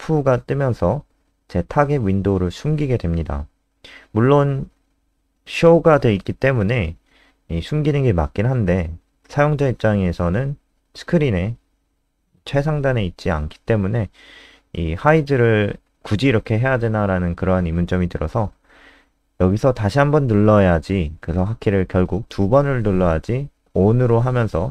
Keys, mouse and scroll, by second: 21.1 click, 23.4 ctrl+alt+space, 24.0 click.